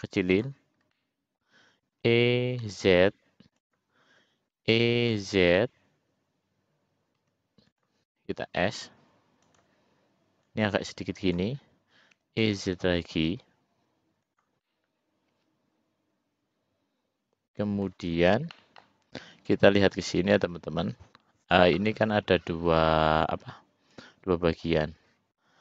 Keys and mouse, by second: 1.1 middle click, 2.1 e, 4.7 e, 8.7 s, 10.8 click, 12.3 e, 14.8-18.1 middle drag, 18.7 middle click.